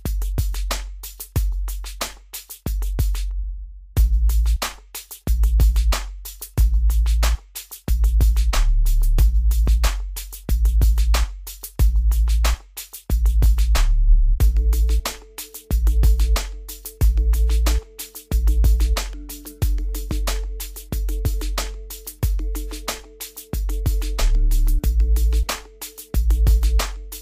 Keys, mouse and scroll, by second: 0.8 scroll up 1, 2.4-2.8 scroll, 4.0-4.8 scroll down 1, 4.8 click, 5.1-5.6 scroll down 1, 5.6-12.3 drag, 14.2 scroll up 1, 15.5 click, 20.6-21.0 scroll up 1, 21.0 scroll down 1, 22.1 click, 22.7-23.4 scroll up 1, 23.7-25.1 middle drag, 25.1 click.